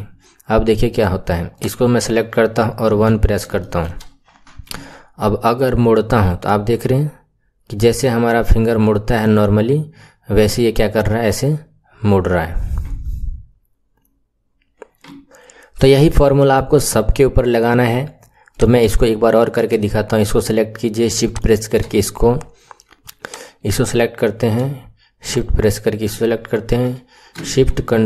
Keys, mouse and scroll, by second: 1.5 click, 2.7 KP_1, 3.6-4.7 shift+middle drag, 4.7 r, 18.4 click, 21.2 shift+click, 23.1 click, 25.2 shift+click.